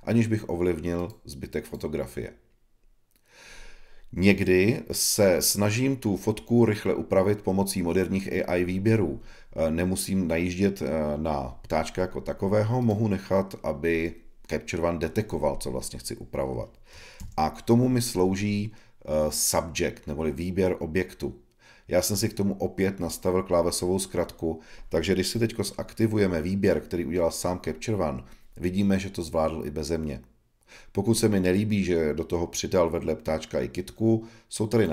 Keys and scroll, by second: 17.1 super+s.